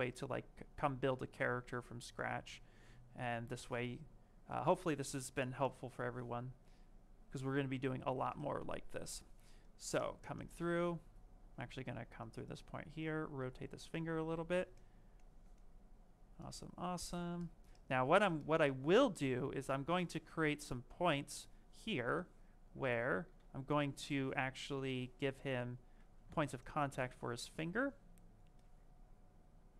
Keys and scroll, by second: 6.0 w, 29.5 ctrl+space.